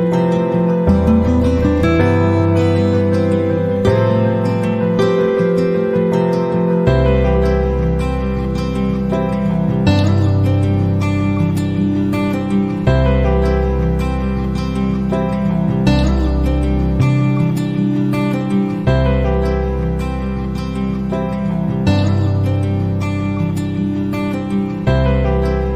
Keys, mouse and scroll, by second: 4.9 click, 8.4 click, 12.5 click, 16.2 click, 18.1 ctrl+click, 21.2 click, 22.7 click, 23.2 click.